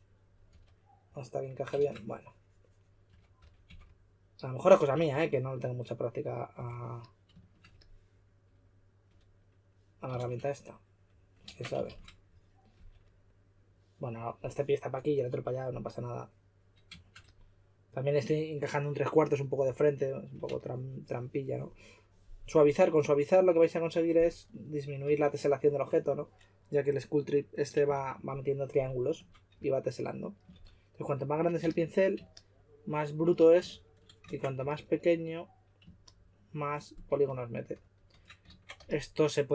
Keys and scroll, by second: 0.5 2, 2.8-4.9 typing, 6.3-7.0 typing, 11.4 super+z, 12.7 2, 24.2-25.0 typing, 27.9 shift+f, 29.5 s, 30.5 shift+f, 31.6 s, 33.6 shift+f, 34.2 super+z, 34.5 s, 37.0-38.7 typing.